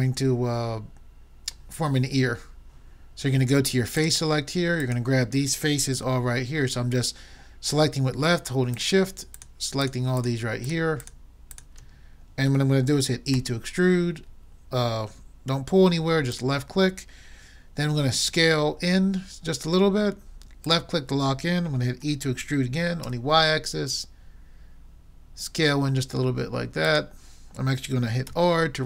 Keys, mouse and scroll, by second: 4.0-6.6 drag, 8.8-13.2 drag, 13.4 e, 16.5-18.1 drag, 18.3 s, 22.0 s, 28.3 r.